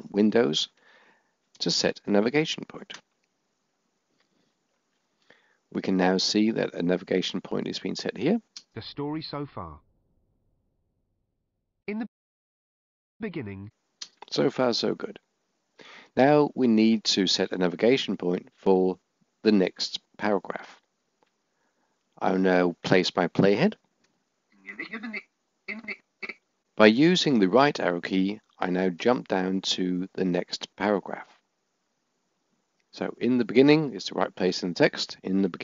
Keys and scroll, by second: 26.2 Right.